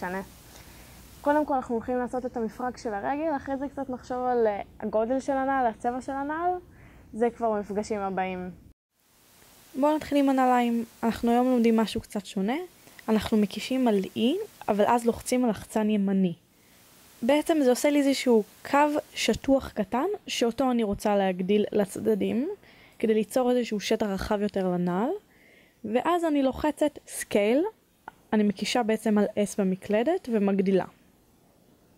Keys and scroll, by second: 12.2 1, 14.4 3, 17.7 e, 22.2 e, 30.6 s.